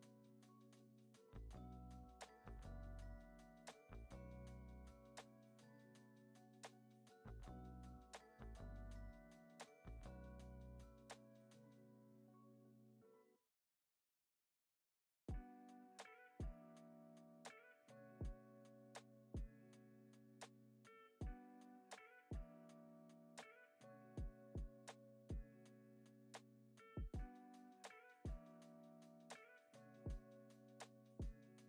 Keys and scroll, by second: 1.8 super+c, 2.0 super+v, 3.6 space, 5.1 space, 5.4 super+s, 6.4 space, 31.4 super+s.